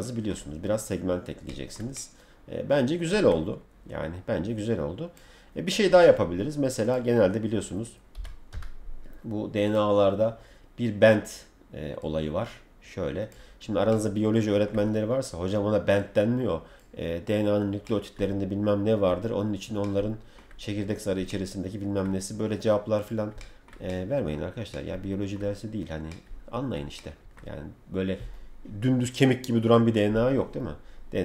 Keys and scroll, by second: 8.1 b.